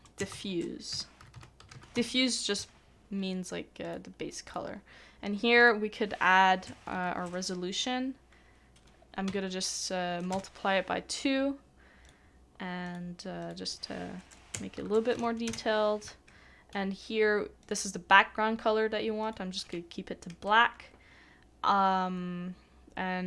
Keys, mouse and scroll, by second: 0.8 typing, 6.6-7.0 typing, 10.3 Return, 14.5 Return, 15.1 typing.